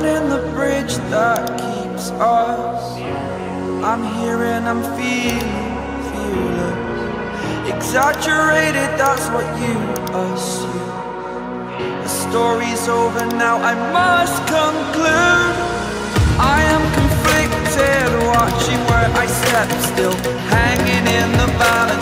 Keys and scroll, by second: 2.0 ctrl+d.